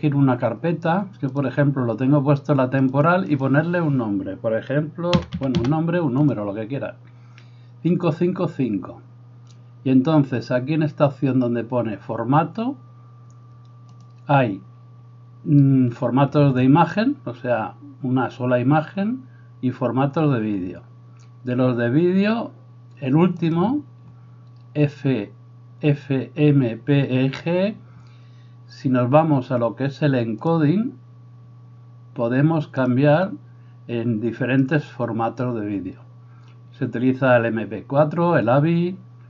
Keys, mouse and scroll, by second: 3.1 click, 5.4 5, 13.9-39.2 drag.